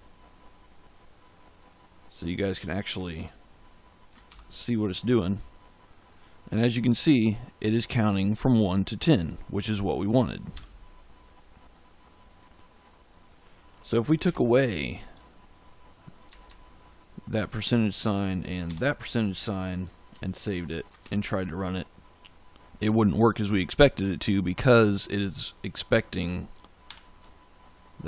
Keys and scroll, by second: 3.1 ctrl+s, 4.2 ctrl+shift+z, 10.5 f, 14.2 BackSpace, 15.1 Right, 18.6 BackSpace, 20.0 ctrl+s, 20.9 ctrl+shift+z, 26.8 shift+5.